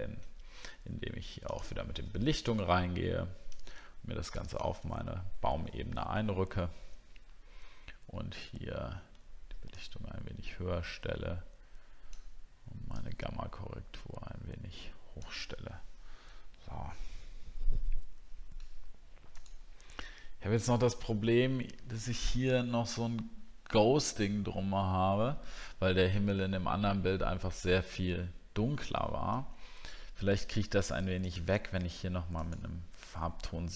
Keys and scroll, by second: 20.1 alt+scroll up 1.